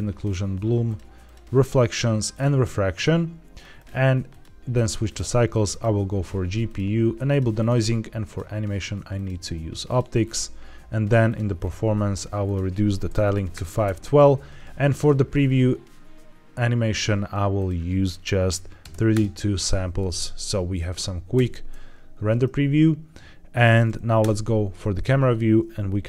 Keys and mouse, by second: 0.1 click, 0.7 click, 1.1 click, 2.2 click, 2.9 drag, 3.6-4.3 drag, 5.0-5.7 drag, 6.5 click, 7.2 click, 7.5 click, 8.2-9.2 drag, 9.8 drag, 11.1 click, 12.4-13.5 drag, 13.7 q, 14.9 drag, 17.5-19.0 drag, 21.3 ctrl+s, 24.1 KP_0.